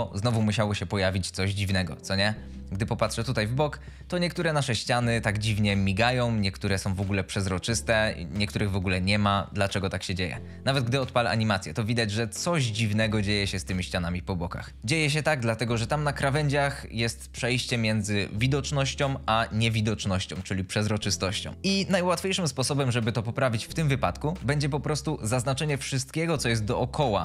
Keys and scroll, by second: 11.4 space.